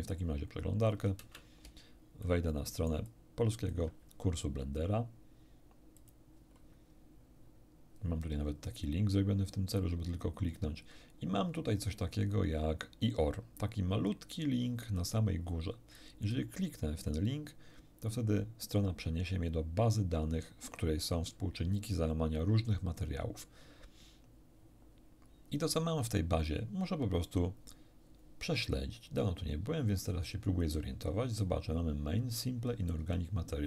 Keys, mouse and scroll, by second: 1.2 alt+space, 2.2-3.9 alt+right drag, 3.1 alt+click, 5.9 click, 16.7 click, 21.7 ctrl+middle click, 21.7-22.1 ctrl+scroll up 1.